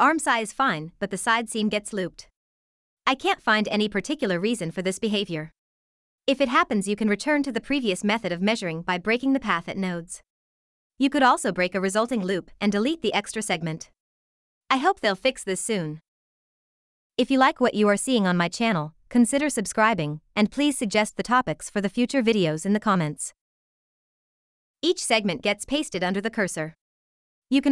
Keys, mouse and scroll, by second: 0.4 click, 2.2 click, 6.5 click, 9.3 shift+click, 11.5 ctrl+c, 12.3 click, 14.4 ctrl+v, 21.0 click, 22.9 click, 25.2 ctrl+c, 25.8 click.